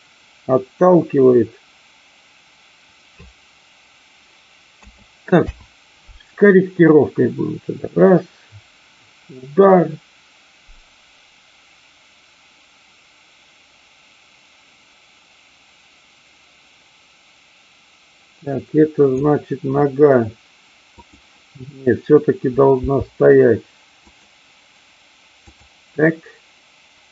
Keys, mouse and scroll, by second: 5.4 i, 6.8-19.1 drag, 20.9 click, 22.8 g, 24.0 click, 25.4-26.4 drag.